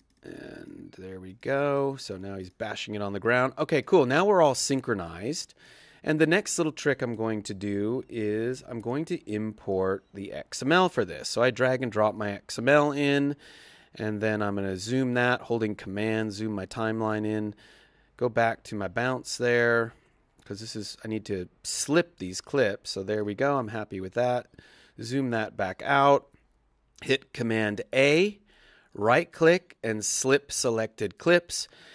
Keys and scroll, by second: 27.5 super+a.